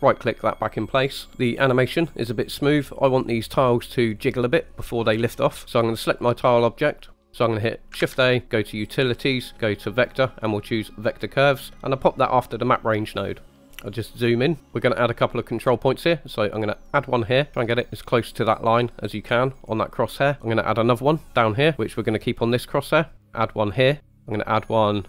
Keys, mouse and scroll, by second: 0.0 right click, 6.1 click, 8.0 shift+a, 13.2 click, 13.6 middle click, 13.7-14.3 scroll up 4, 14.6 middle click, 16.9 click, 17.5 click, 22.4 click, 24.0 click.